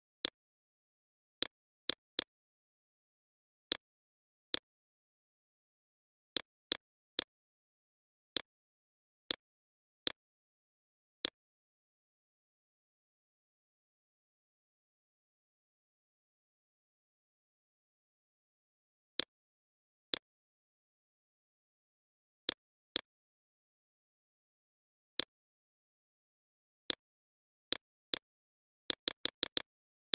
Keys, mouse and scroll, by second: 2.7 right click, 3.1 click, 8.5 right click, 8.9 click, 14.5 alt+click, 15.7 click, 19.5 right click, 19.9-25.5 drag, 28.2 click, 29.8 right click.